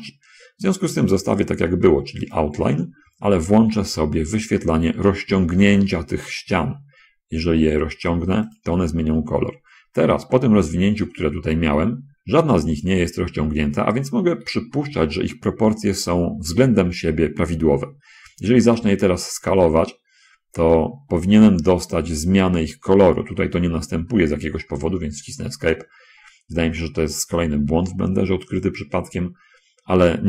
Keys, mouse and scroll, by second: 2.6 click, 15.5 shift+middle click, 19.1 s, 25.2 Escape.